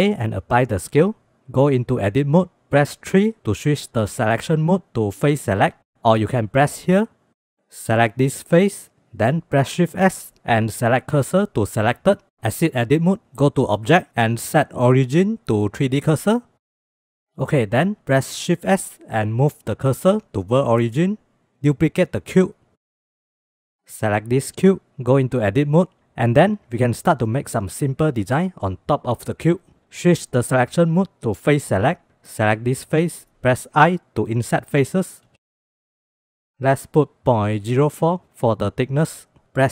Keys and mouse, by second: 1.6 Tab, 3.0 3, 7.4 click, 9.4 shift+s, 12.8 Tab, 13.6 click, 16.7-17.1 drag, 18.5 shift+s, 21.5 shift+d, 23.0 click, 24.2 click, 25.3 Tab, 33.3 shift+click, 33.7 i, 36.6-39.4 drag.